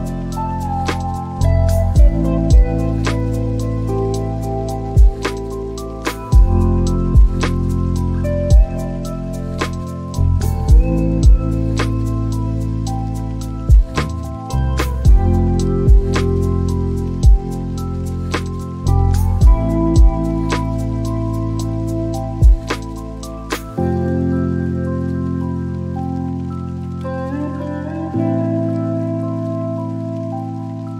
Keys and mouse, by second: 4.5 click, 25.3 click, 26.0 click.